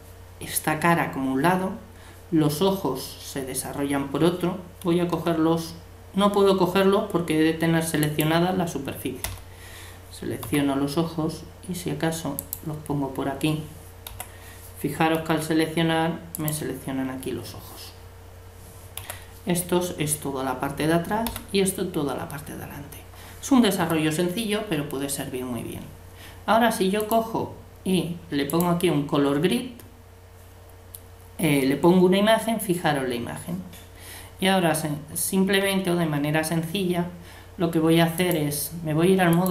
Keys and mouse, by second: 5.2 l, 8.0-9.8 drag, 9.2 l, 10.4 g, 14.1 l, 15.2 g, 19.0 l, 21.3 l, 23.8 a, 27.0-28.8 drag, 35.6 a, 38.1-39.5 drag.